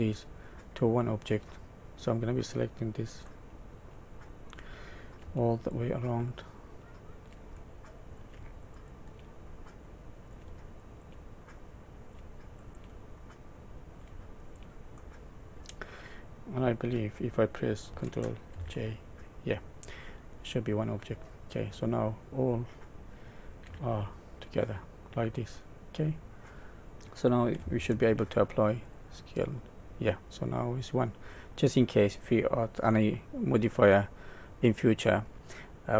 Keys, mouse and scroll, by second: 0.4 middle click, 3.2 middle click, 5.5 shift+click, 6.2 shift+middle click, 7.5 middle click, 8.6 shift+click, 9.5 middle click, 10.8 shift+click, 11.4 middle click, 12.6 shift+click, 13.2 middle click, 14.4 shift+click, 15.0 middle click, 18.5 ctrl+j, 20.7 middle click, 21.5 click, 22.1 click, 23.6 g, 26.3 middle click, 28.0 ctrl+a, 31.5 middle click, 35.6 click, 35.6 middle click.